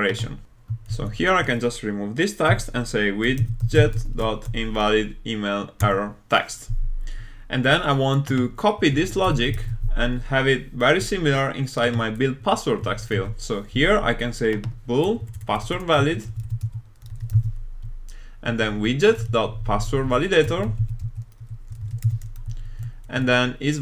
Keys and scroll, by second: 5.9 Return, 9.5 super+c, 13.1 super+v.